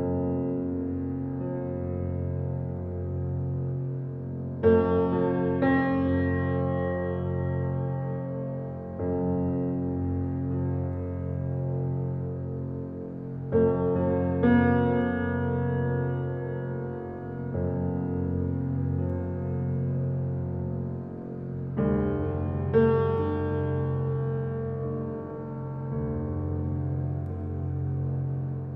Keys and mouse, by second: 0.7 `, 1.0 click, 2.3 click, 3.2 shift+a, 6.3 s, 9.5 Tab, 10.7 s, 13.9 g, 15.9 g, 18.8 click, 19.6 g, 21.5 click, 22.2 g, 24.5 click, 26.9 Tab, 28.3 ctrl+r.